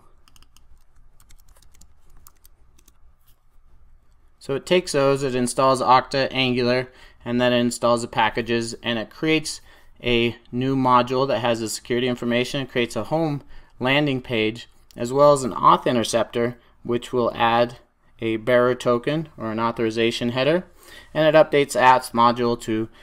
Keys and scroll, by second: 1.1 super+c.